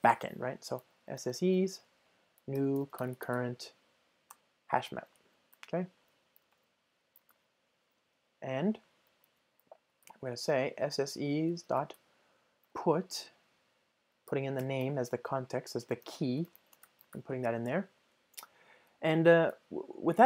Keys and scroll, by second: 4.4 Return, 6.5 Return, 7.3 alt+super+l, 12.7 Return, 17.1 alt+super+l.